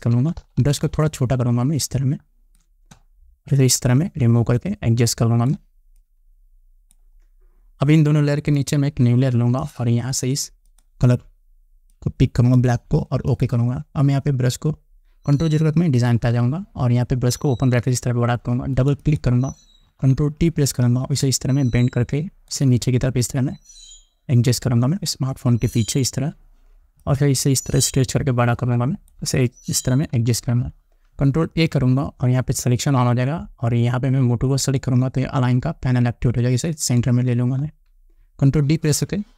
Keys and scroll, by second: 16.7 ctrl+0, 20.4 ctrl+t, 30.7 Return, 32.1 ctrl+a.